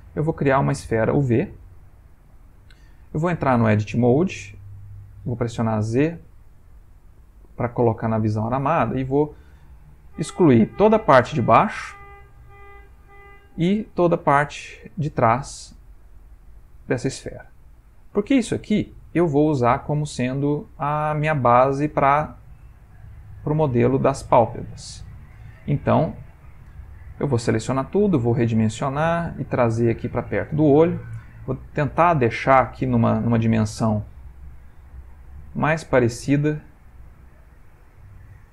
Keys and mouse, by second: 1.2 shift+a, 1.9 ctrl+middle click, 3.1 Tab, 5.3 z, 6.0 z, 6.6 z, 8.5 click, 10.0 x, 12.2 click, 13.2 shift+middle click, 14.2 click, 16.1 x, 17.1 middle click, 23.5 click, 24.1 ctrl+middle click, 24.9 shift+middle click, 27.0 a, 27.4 s, 29.1 g, 30.5 s, 31.5 ctrl+middle click, 32.3 shift+middle click, 32.9 ctrl+middle click, 34.5 s, 35.8 g.